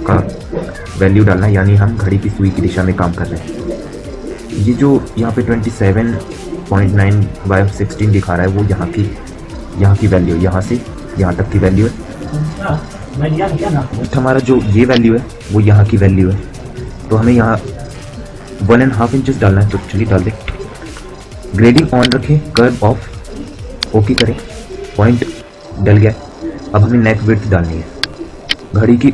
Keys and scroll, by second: 13.4 F9.